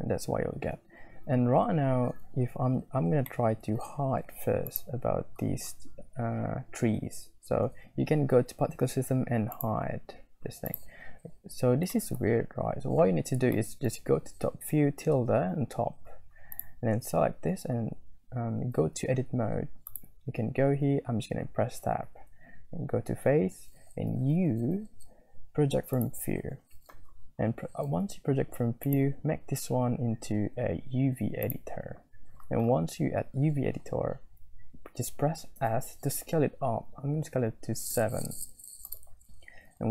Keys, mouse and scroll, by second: 3.4 middle click, 3.5 click, 10.0 middle click, 10.6 middle click, 12.1 shift+middle click, 13.6 middle click, 13.8 click, 16.5-19.0 middle drag, 20.0 click, 21.1 Tab, 24.1 u, 29.0-31.8 drag, 35.6 s, 39.5 Tab.